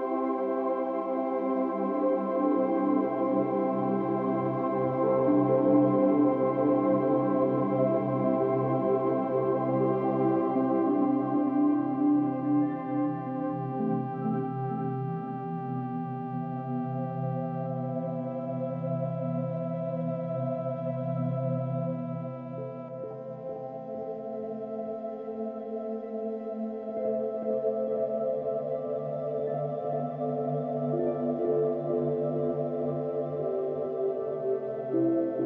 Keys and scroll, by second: 5.6 b, 7.4 space, 9.4 ], 34.6 v.